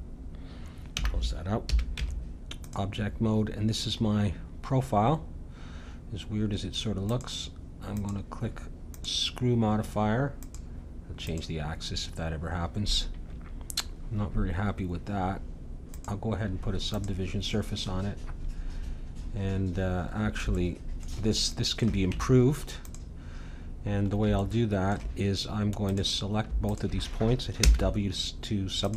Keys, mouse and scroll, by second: 0.9 n, 1.7 a, 1.9 Tab, 4.0-5.9 middle drag, 7.0-9.7 drag, 10.4-15.6 drag, 15.9-17.7 drag, 20.1-23.9 middle drag, 22.1 Tab, 23.9 click, 24.4 middle click, 25.9-28.3 drag, 27.6 w.